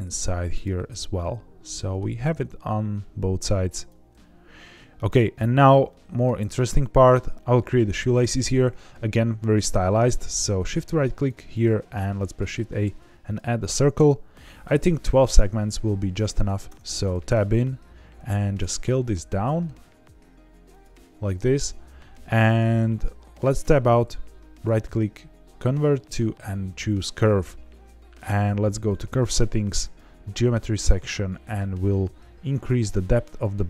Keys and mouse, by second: 0.5 click, 0.7-1.9 middle drag, 2.0 g, 2.3 x, 3.7 click, 4.1-5.1 middle drag, 5.8 shift+middle click, 6.4 middle click, 11.1 shift+right click, 11.8 shift+a, 16.6 Tab, 18.1 s, 20.6 click, 23.6 Tab, 24.5-26.8 right drag, 28.7 click, 29.8 click, 33.0-33.6 drag.